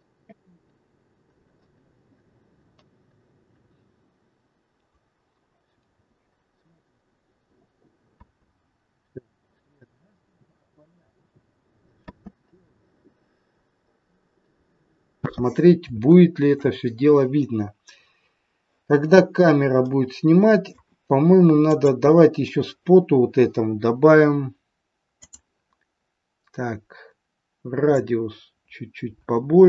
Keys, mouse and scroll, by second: 4.8 click, 6.9 click, 8.1 space, 12.1 space, 12.9 middle click, 13.8 scroll up 4, 14.6 middle click, 16.0 shift+middle click, 17.9-18.3 scroll down 3, 19.8 middle click, 21.6 click, 25.1 click, 27.8 click.